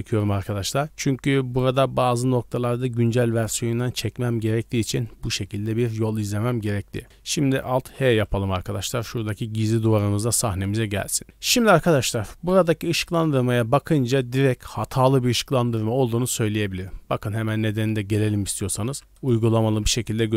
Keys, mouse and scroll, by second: 9.4 right click, 9.7-10.2 middle drag, 10.4-10.7 scroll up 1, 10.8 shift+middle drag, 16.6 middle drag, 16.9-17.4 scroll up 2, 18.8 shift+a, 19.1 click, 19.6 shift+a.